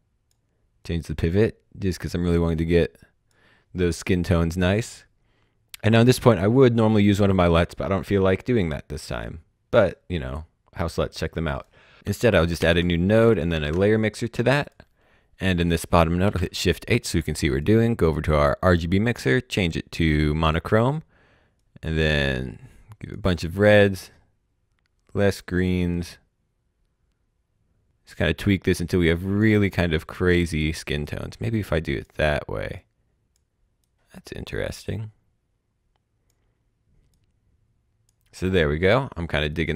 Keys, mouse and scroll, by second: 8.1 click, 9.7 right click, 11.5 click, 12.0-13.5 typing, 12.5 alt+Num_Lock, 14.6 click, 16.1 shift+Num_Lock, 16.1 click, 16.2 shift+h, 17.6 click, 20.3 click, 39.5 click.